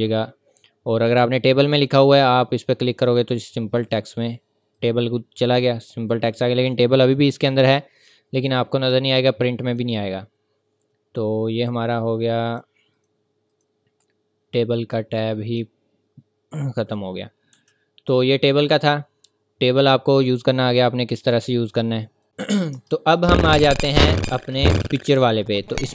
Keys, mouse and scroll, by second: 1.8 click, 8.8 scroll up 1, 9.2-9.7 scroll down 1, 9.7 click, 17.5 Delete, 20.2 scroll up 1, 20.7-21.1 scroll down 1, 22.2 click, 22.7 Return, 23.3-24.3 scroll down 1, 25.6 click.